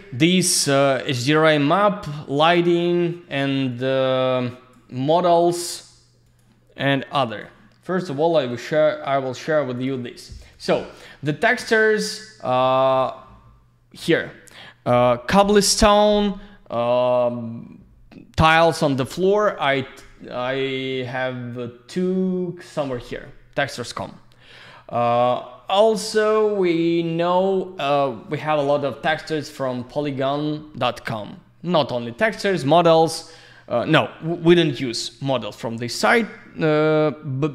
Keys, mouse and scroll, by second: 1.3 click, 3.7 click, 6.2 click, 7.3 click, 8.5 click, 10.1 click, 10.5 click, 25.0 click.